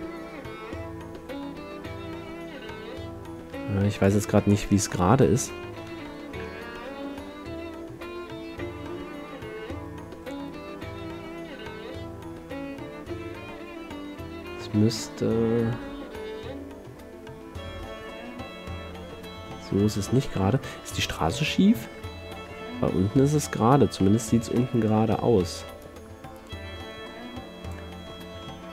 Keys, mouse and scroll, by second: 4.2 click, 4.6-6.0 middle drag, 6.1-7.5 middle drag, 7.5 r, 20.8-24.2 middle drag, 24.8-26.0 middle drag, 26.0-27.9 drag, 28.2-28.7 middle drag.